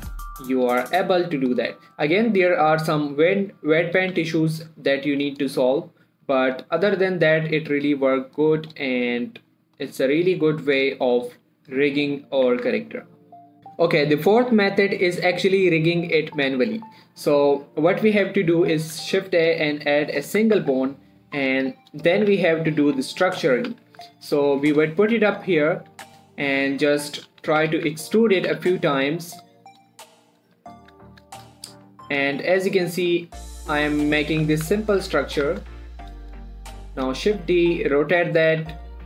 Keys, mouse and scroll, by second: 0.0 r, 0.6 right click, 0.9 click, 1.1 r, 2.0 right click, 2.3 middle click, 2.7 r, 3.1 right click, 3.8 click, 4.4 r, 5.7 right click, 6.0 middle click, 6.7 click, 7.5 middle click, 7.8 r, 8.7 right click, 9.1 click, 9.3 middle click, 9.5 r, 10.2 right click, 10.9 click, 11.7 r, 12.3 right click, 12.5 middle click, 12.9 Tab, 13.2 middle click, 13.6 shift+s, 17.9 shift+s, 19.4 shift+a, 20.6 click, 20.7-21.1 typing, 22.2 click, 22.6 s, 23.1 click, 23.2 g, 23.9 right click, 24.0 g, 24.3 z, 25.1 click, 25.5-26.4 scroll up 1, 26.4 Tab, 26.9 click, 28.0 e, 28.2 z, 28.7 click, 28.8 e, 29.0 z, 30.1 click, 31.2 3, 31.5 shift+middle click, 31.8-32.2 scroll up 1, 32.2 g, 32.7 click, 32.8 e, 33.5 click, 33.6 e, 34.2 click, 34.5 scroll down 1, 34.8 shift+middle click, 34.9 1, 35.2 middle click, 35.5 scroll up 1, 35.7 1, 36.1 shift+middle click, 36.6 click, 37.0 shift+d, 37.4 click, 37.6 r, 38.8 click, 38.9 g.